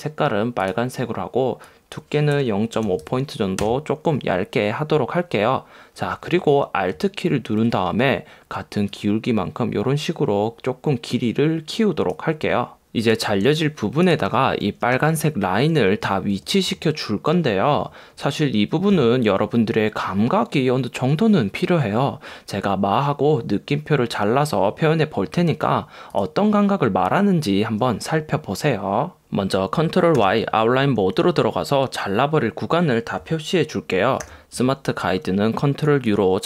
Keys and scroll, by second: 13.5 space, 14.2 super+space.